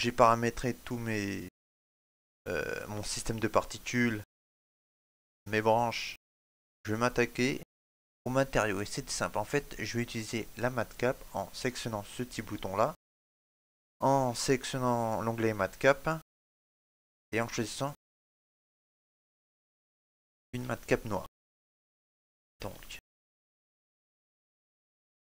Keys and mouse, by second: 3.4 shift+middle click, 3.8 middle click, 5.3 right click, 5.8 shift+middle click, 6.4 middle click, 9.0 click, 12.2 click, 21.1 a, 24.1 shift+middle click, 24.4 middle click.